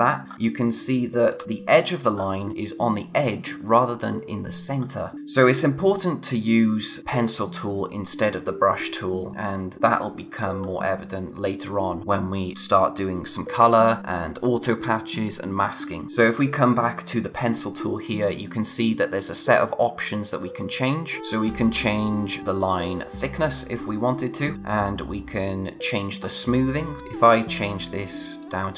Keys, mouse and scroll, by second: 0.3-1.2 scroll up 1, 1.2 click, 2.1-2.8 scroll up 1, 17.6-18.0 scroll up 1, 19.3 click, 26.9 click.